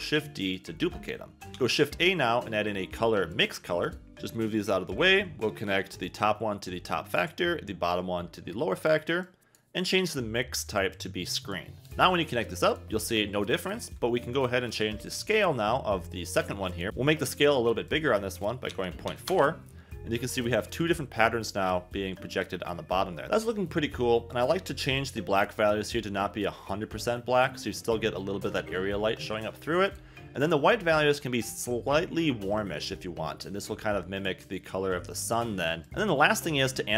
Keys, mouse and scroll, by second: 0.5 click, 1.6 shift+a, 3.8 click, 6.0 click, 7.9 click, 9.2 click, 10.6 click, 11.9 click, 16.1 click, 17.8-19.3 drag, 21.2 click, 24.3 click, 25.0 click, 29.8 click, 30.4 click, 35.2 click.